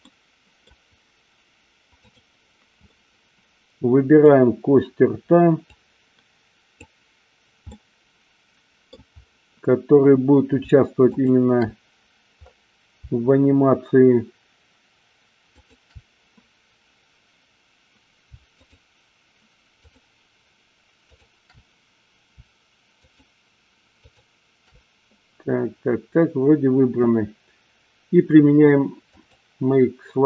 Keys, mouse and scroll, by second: 2.8-4.3 middle drag, 2.8 scroll up 2, 4.2 scroll down 2, 5.6-7.0 drag, 7.7-9.0 middle drag, 11.1 shift+click, 15.4 shift+click, 18.6 shift+click, 19.7 shift+click, 23.0 shift+click, 23.9 shift+click, 29.1 click.